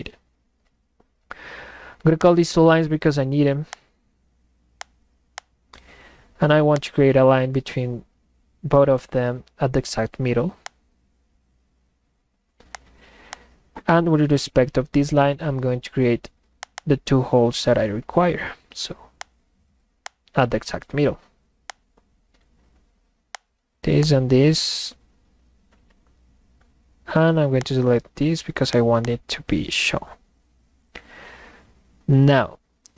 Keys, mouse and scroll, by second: 2.2 click, 3.7 click, 5.4 click, 6.7 click, 10.7 click, 12.7 click, 13.3 click, 16.6 click, 16.8 click, 19.2 click, 20.0 click, 21.7 click, 23.4 click, 24.0 click, 27.6 click, 28.7 click, 29.0 click.